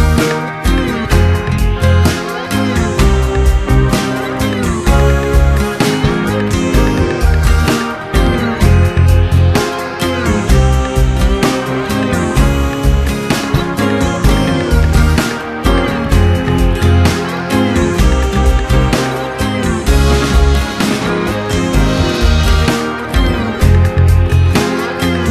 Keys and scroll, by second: 2.2 space, 7.1 [, 9.3 space, 9.7 s, 13.0 ], 15.9 space, 17.3 space, 18.3 space, 23.5 space.